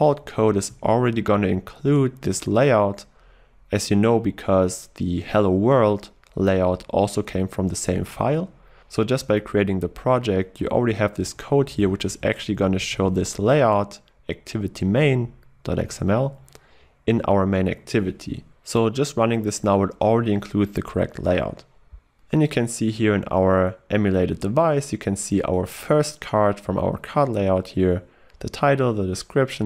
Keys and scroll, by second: 13.1 ctrl+w.